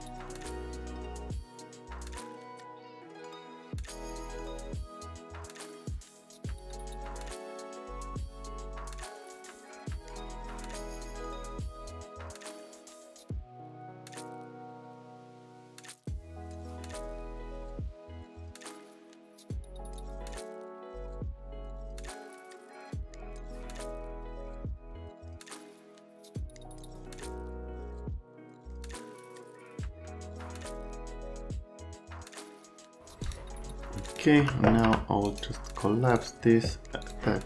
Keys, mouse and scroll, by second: 4.5 F3, 4.7 F3, 4.8 click, 5.2 click, 5.4 click, 5.6 click, 5.8-6.6 typing, 6.2 right click, 6.6 click, 7.2 click, 8.0 click, 8.1 right click, 8.5 click, 8.6-10.3 typing, 8.7 click, 9.2 click, 9.4 click, 10.0 click, 10.9 click, 11.1 F3, 11.5 shift+click, 11.6-12.4 typing, 12.3 right click, 12.5 click, 12.7 middle click, 13.2 click, 14.0 scroll down 1, 14.2 click, 14.9 scroll down 1, 15.0 click, 15.1 scroll up 1, 15.7 middle click, 16.0 shift+middle click, 16.6 middle click, 16.7 middle click, 16.8 right click, 17.0 shift+click, 17.5 click, 17.6 right click, 17.8 shift+click, 18.3 click, 18.4 right click, 18.6 shift+click, 19.0 click, 19.1 right click, 19.3 shift+click, 19.7 click, 19.8 right click, 20.1 shift+click, 20.6 right click, 20.9 shift+right click, 21.2 right click, 21.3 middle click, 21.6 shift+right click, 22.1 click, 22.4 click, 22.5 right click, 22.7 click, 23.1 click, 23.2 right click, 23.4 click, 23.7 shift+click, 24.1 click, 24.2 right click, 24.4 shift+middle click, 24.8 middle click, 25.0 shift+middle click, 25.4 middle click, 25.5 right click, 25.7 right click, 26.4 ctrl+middle click, 26.5 click, 26.7 click, 27.0 click, 27.2 click, 27.4 middle click, 28.8 q, 29.2 F3, 29.6 middle click, 29.9 right click, 30.1 scroll up 1, 30.5 scroll down 1, 31.3 click, 31.6 middle click, 32.3 click, 32.4 right click, 32.7 click, 33.2 click, 34.0 click, 34.8 F3, 35.2 right click, 36.1 click, 37.0 click.